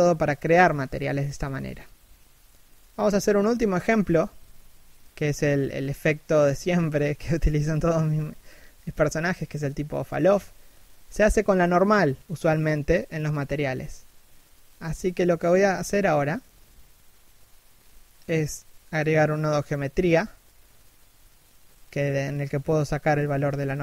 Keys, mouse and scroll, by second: 14.1 r.